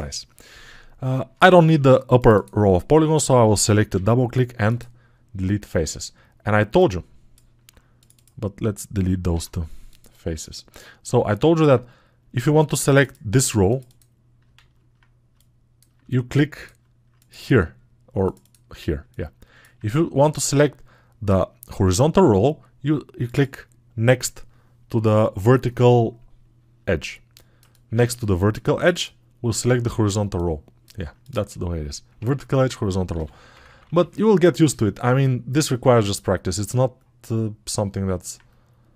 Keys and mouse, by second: 32.2 ctrl+Tab, 37.8-38.9 alt+drag.